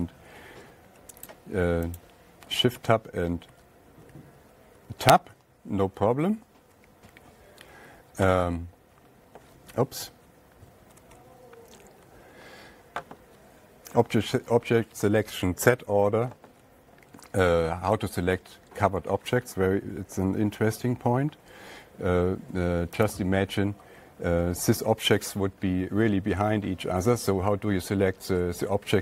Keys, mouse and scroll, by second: 0.8 Tab, 1.7 click, 2.4 click, 3.2 Tab, 3.9 Tab, 4.8 Tab, 5.2 Tab, 6.6 alt+Tab, 11.4 Page_Up, 18.7 alt+Tab, 21.0 Page_Down, 23.5-24.7 drag, 25.1-28.6 drag.